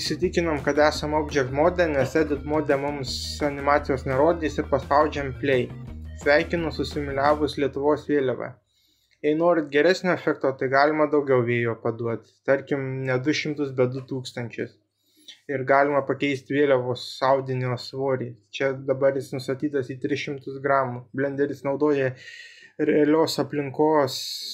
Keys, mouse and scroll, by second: 3.4 click, 4.9-5.6 middle drag, 7.2 click, 10.3-12.6 drag, 21.6 click.